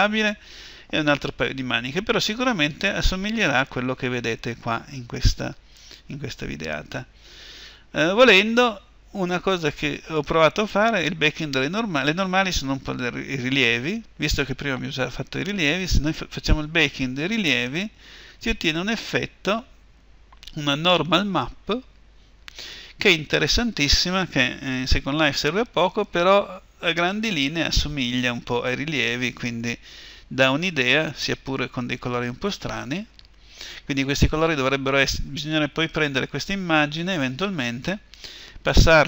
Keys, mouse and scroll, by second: 17.7-39.0 drag.